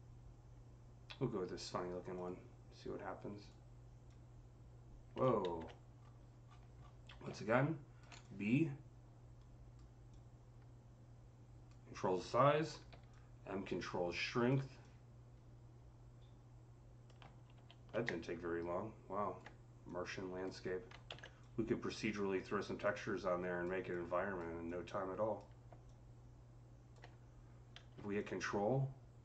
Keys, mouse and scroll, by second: 2.0 click, 2.0 c, 3.2 click, 3.9-5.9 drag, 5.3 ctrl+z, 5.8 scroll up 3, 6.4-6.9 scroll down 9, 7.7 click, 7.7 typing, 8.0-18.1 drag, 12.7-13.9 typing, 17.4 ctrl+z, 17.4 typing, 18.1-21.2 alt+drag, 20.9 ctrl+z, 21.2-28.0 drag, 28.0-29.2 ctrl+drag.